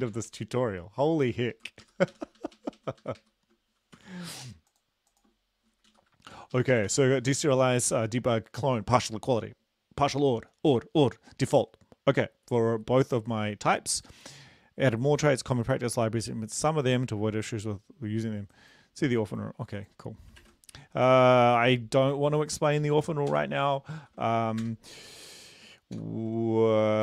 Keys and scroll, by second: 0.2 ,, 1.0 End, 1.4 Left, 1.6 Left, 1.8 shift+Up, 2.2 shift+Home, 2.4 ctrl+shift+Right, 2.6 ctrl+shift+Right, 2.8 ctrl+shift+Right, 3.2 ctrl+shift+Right, 4.0 ctrl+c, 5.9 Down, 6.4 End, 6.6 Left, 6.8 Left, 6.9 ctrl+v, 7.4 ctrl+s, 20.4 ctrl+`, 23.3 ctrl+l, 24.0 ctrl+v, 24.7 Return, 26.0 ctrl+;.